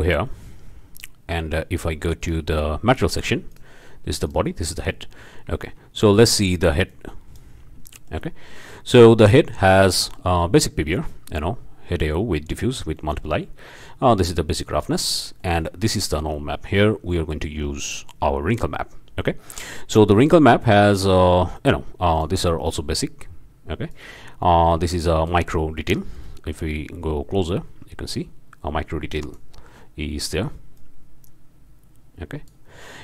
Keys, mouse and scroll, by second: 0.3 click, 2.2 click, 3.0 scroll up 1, 3.5 click, 4.2 right click, 4.9 scroll up 1, 5.2 scroll down 1, 6.9 click, 7.7 scroll up 3, 7.9 shift+click, 8.4 shift+scroll up 2, 9.1 middle click, 9.9-10.5 middle drag, 13.0 middle click, 13.7 middle drag, 14.7-15.1 middle drag, 15.3-15.6 drag, 17.1 click, 17.8 click, 18.3 scroll up 1, 18.6-19.8 drag, 20.6 click, 21.6-21.9 drag, 22.1 click, 22.9-24.1 drag, 24.7 click, 25.7 scroll up 1, 26.2-26.7 drag, 26.9 scroll up 1, 28.1-29.5 drag, 30.2 drag, 30.7-32.6 drag, 32.7-33.0 scroll down 1.